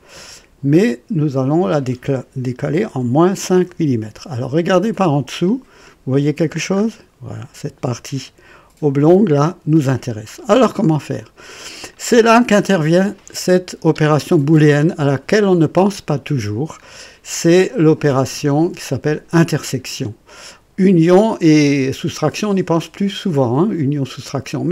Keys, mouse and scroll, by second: 0.2 click, 1.4 click, 2.9 KP_Subtract, 3.0 KP_Subtract, 3.2 KP_5, 3.6 Return, 3.8 KP_Enter, 4.9 click, 5.4 click, 6.7-7.0 scroll up 1, 9.3 click, 10.3-10.7 scroll down 2, 11.1 click, 11.9 click.